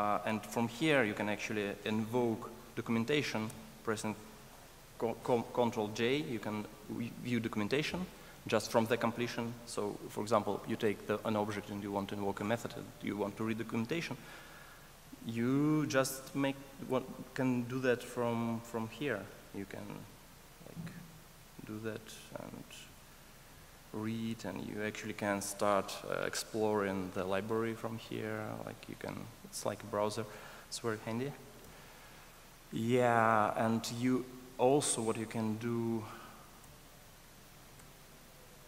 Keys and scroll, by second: 3.5 F1, 37.9 alt+shift+i.